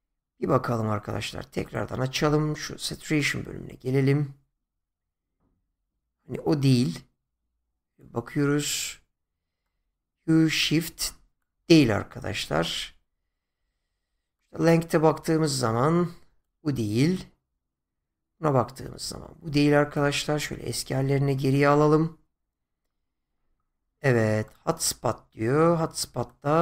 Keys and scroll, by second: 11.6 ctrl+z, 20.7 ctrl+z.